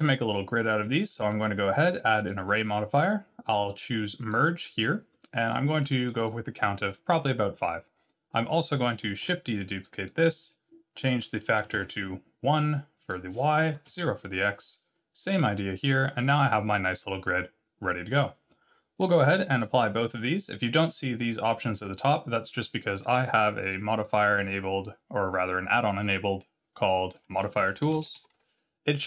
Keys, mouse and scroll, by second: 1.0 click, 5.8 click, 6.0 click, 6.2 click, 9.2 shift+d, 10.0 click, 11.0 click, 13.0 click, 15.8 scroll down 2, 19.5 click, 23.9 click.